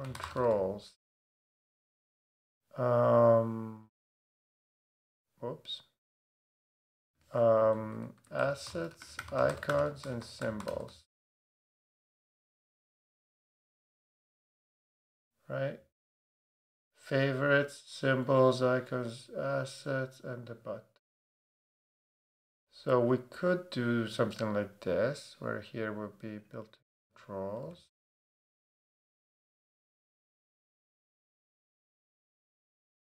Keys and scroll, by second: 0.0-1.2 typing, 3.8 super+=, 6.4 Return, 7.0 Right, 7.7 shift+Right, 8.2-11.4 typing, 27.6 super+a, 32.2 Down.